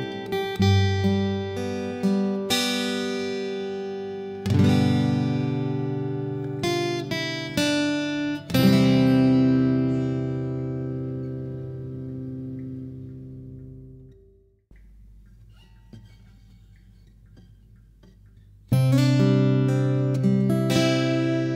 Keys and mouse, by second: 11.7 click, 15.7-21.5 drag.